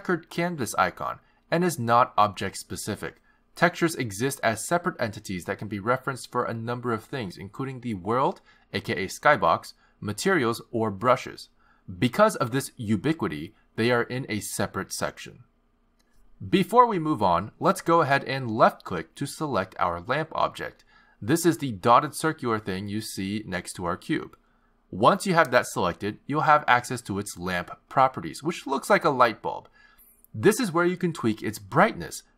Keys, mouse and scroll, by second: 13.5 click, 16.8 click, 20.3 click, 29.9 click, 31.9 click.